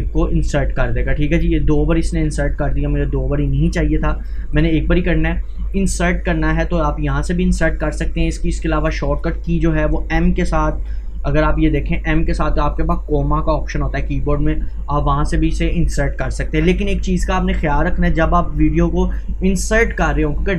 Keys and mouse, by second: 2.2 Delete, 3.5 click, 3.8 Delete, 4.3 click, 4.5 Delete, 5.3-9.1 drag, 9.1 Delete, 15.7-20.5 drag.